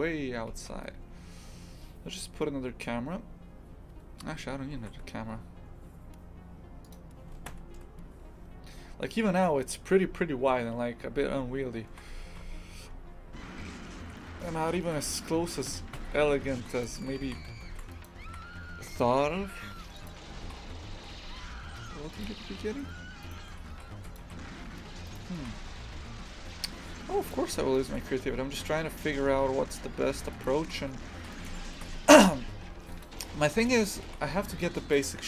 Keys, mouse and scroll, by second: 7.5 ctrl+KP_1, 8.8 scroll down 1, 11.9 shift+f, 17.2 shift+f, 18.2 shift+f, 20.0 click, 20.4 shift+f, 23.2 right click, 23.5 Tab, 23.7 shift+f, 24.2 3, 25.0 right click, 25.4 shift+f, 27.7 shift+right click, 28.3 s, 30.6 shift+f, 31.5 Tab, 32.0 shift+f, 33.9 click, 34.0 shift+f.